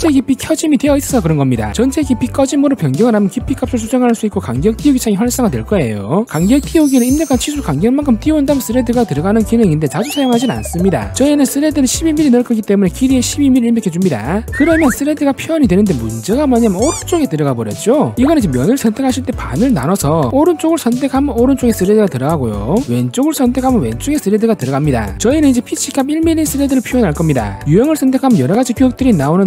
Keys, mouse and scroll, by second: 2.2 click, 3.4 click, 3.8 1, 4.1 2, 6.3 click, 7.1 1, 8.8 click, 18.3 click, 20.0 click, 21.6 click, 22.5 click, 27.4 click.